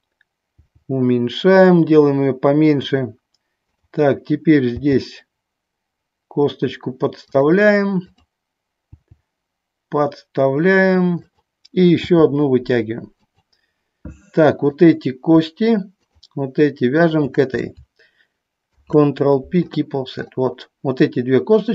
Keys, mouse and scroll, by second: 0.7 g, 3.0 click, 3.9 click, 4.9 g, 7.4 click, 8.3 click, 9.2 g, 11.4 click, 12.3 e, 13.4 click, 14.9 click, 16.1 shift+click, 17.1 shift+click, 18.8 ctrl+p.